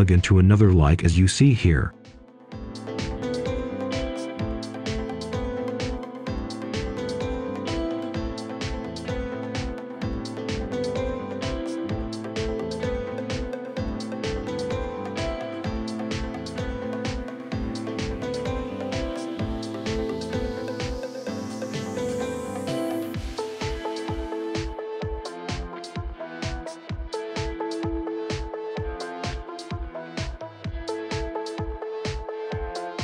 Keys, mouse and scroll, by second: 4.3 right click, 4.9-6.8 scroll up 1, 7.1 click, 7.6-8.5 scroll down 1, 8.5 click, 8.8-9.2 scroll down 1, 9.2 scroll up 1, 9.3 scroll down 1, 9.6 right click, 11.1 click, 12.9 Delete, 13.6 right click, 15.1 click, 15.6-15.9 scroll down 1, 15.9 right click, 16.4 scroll up 1, 17.5 click, 19.1 right click, 19.9-20.5 scroll up 1, 20.5 right click, 25.7 scroll down 1, 25.8 right click, 26.3 scroll up 1, 26.9-29.4 right drag, 29.6 scroll up 1, 30.2 scroll down 1, 30.5-30.9 scroll up 1, 30.9 shift+right click, 31.5 shift+right click, 31.9 shift+right click, 32.3 shift+right click, 32.6 shift+right click.